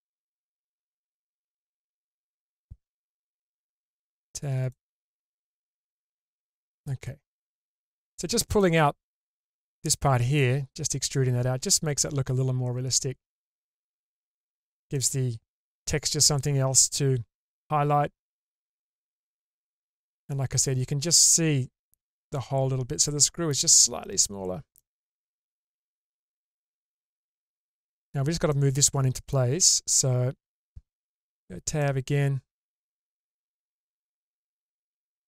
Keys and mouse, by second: 1.4-2.2 middle drag, 3.2 Tab, 5.4 click, 6.1 shift+space, 6.6-7.7 middle drag, 8.6-9.0 middle drag, 9.0 click, 10.4-11.7 middle drag, 13.0-14.4 middle drag, 14.9-19.8 middle drag, 20.6-21.3 middle drag, 23.0 middle click, 23.2 click, 23.2 right click, 24.8-25.2 drag, 24.8-25.2 right drag, 25.2 middle click, 26.0-26.7 middle drag, 27.2-27.8 middle drag, 28.5-29.3 middle drag, 29.8 click, 31.3 Tab, 31.8-32.9 middle drag, 35.1 alt+z.